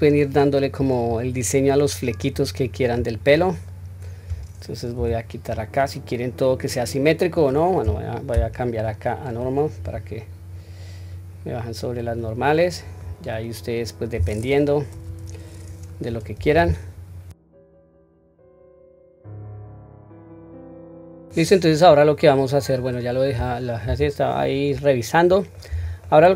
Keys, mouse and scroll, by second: 0.0 click, 1.2-2.9 drag, 3.3-3.7 scroll down 1, 3.7-4.9 middle drag, 5.0 q, 5.5-5.8 scroll up 1, 5.8 middle click, 7.3 click, 8.3 ,, 10.6 click, 12.6 middle click, 13.2-13.7 scroll down 2, 13.7 middle click, 14.9 KP_3, 15.4 scroll up 2, 16.4 scroll up 1, 16.6 q, 18.0 click, 19.0 click, 19.8 click, 20.1 click, 20.1 shift+middle click, 20.5 click, 21.0 middle click, 21.0 scroll down 2, 21.2 middle click.